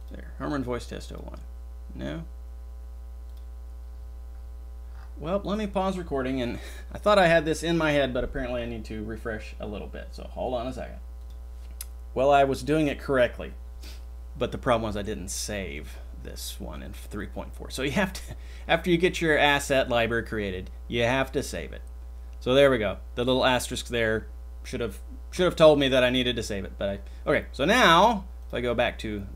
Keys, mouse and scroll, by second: 16.9-17.6 drag, 19.7-21.1 drag.